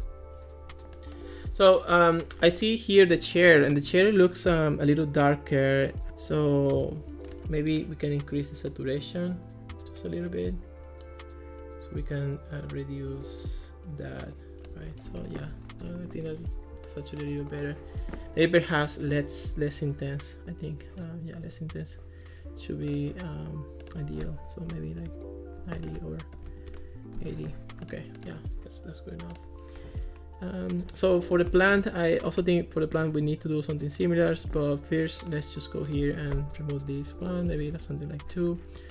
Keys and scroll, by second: 15.1 Escape, 24.5-27.0 typing, 37.6 2, 37.8 Return.